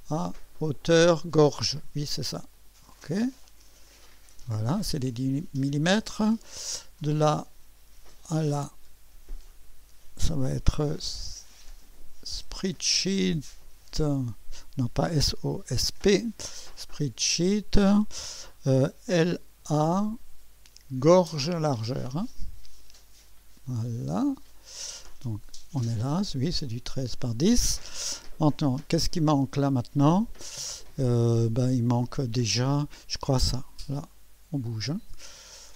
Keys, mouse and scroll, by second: 0.0 typing, 1.7 click, 2.5 click, 3.9 click, 6.5 click, 8.2 click, 9.5 click, 11.7 click, 12.3 typing, 13.7 typing, 15.1-16.4 typing, 16.6 click, 18.8-19.8 typing, 22.1 click, 23.3 click, 24.5 click, 25.3-27.5 typing, 25.7-26.8 drag, 31.3 click, 34.0-35.7 drag.